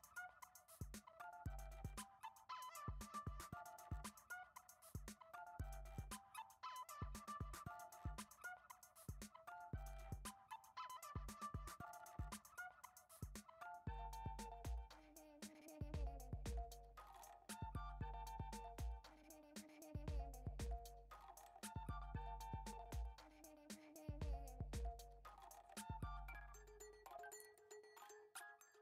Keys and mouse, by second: 0.2 click, 1.5 click, 2.5-2.8 shift+middle drag, 3.0 click, 4.8 F6, 5.5 shift+right click, 5.9 shift+a, 7.5 shift+middle click, 8.2 s, 9.7 middle click, 10.1 Tab, 10.8 f, 11.2-11.5 shift+middle drag, 12.5 i, 16.0 g, 17.2 a, 17.4 g, 18.9-19.3 shift+middle drag, 19.9 e, 22.7 click, 23.3 g, 24.4 s, 25.7 g, 28.0 click.